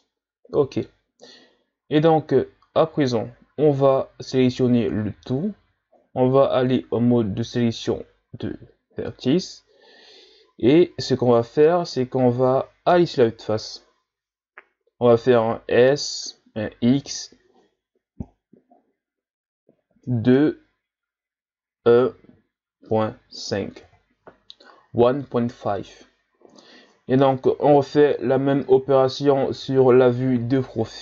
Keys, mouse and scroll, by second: 0.0-3.1 middle drag, 4.5 a, 6.0 ctrl+Tab, 12.9 KP_1, 14.6-15.0 ctrl+scroll down 2, 15.4-16.2 shift+scroll up 1, 16.2 s, 29.6 KP_3.